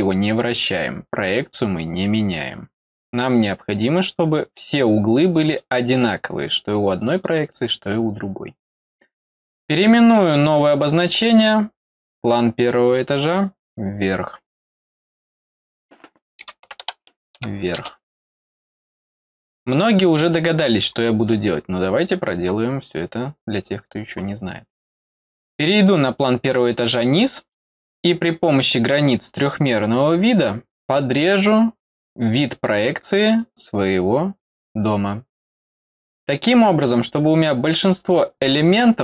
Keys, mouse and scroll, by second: 4.2 middle click, 5.3 click, 5.4 click, 7.0 click, 7.1 click, 10.2 right click, 12.0 click, 12.8 click, 13.3-15.7 drag, 25.1 click, 25.3 click, 26.3 scroll down 1, 27.1 middle click, 28.6 click, 29.8-30.9 drag, 33.3-34.6 drag, 37.2 click.